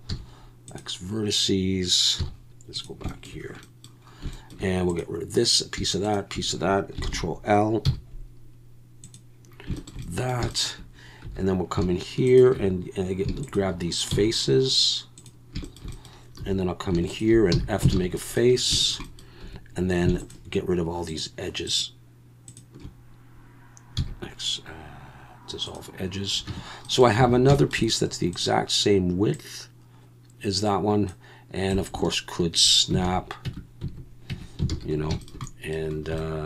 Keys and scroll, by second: 0.1 x, 2.2 z, 7.0 ctrl+l, 7.9 x, 11.3 3, 14.1 x, 16.4 2, 17.5 f, 17.9 alt+a, 19.4 2, 24.0 x, 26.5 Tab, 27.3 alt+a, 33.0 alt+a, 33.4 Tab, 34.3 Tab, 34.7 alt+a.